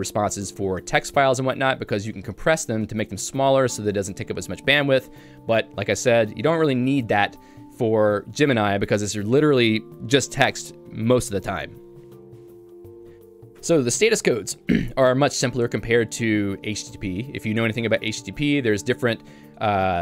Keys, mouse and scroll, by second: 13.1 k, 13.6 Tab.